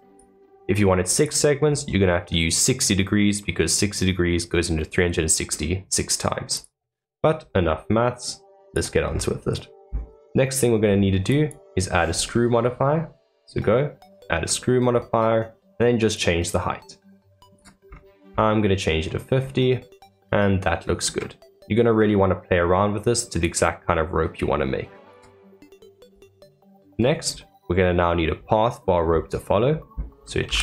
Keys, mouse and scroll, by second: 0.0 click, 0.5-1.1 middle drag, 1.1 click, 6.5 click, 7.4-8.6 middle drag, 8.6 click, 9.0 scroll up 3, 11.2-14.2 drag, 16.1-17.8 drag, 17.8-18.3 scroll down 8, 19.3-19.7 scroll up 2, 19.7-22.9 middle drag, 23.0-25.5 drag, 25.5-26.1 middle drag, 26.1 click, 26.5-26.9 middle drag, 26.9 scroll down 3, 27.3-30.4 middle drag, 30.4 shift+a.